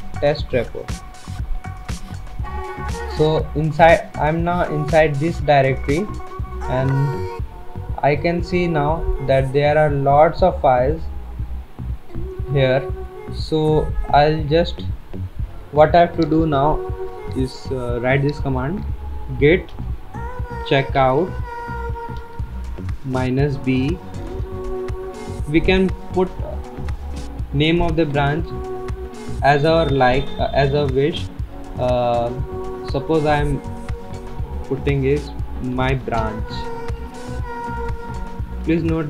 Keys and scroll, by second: 0.0-0.4 typing, 0.9 Tab, 1.8 Return, 19.2-24.4 typing, 35.8-39.0 typing.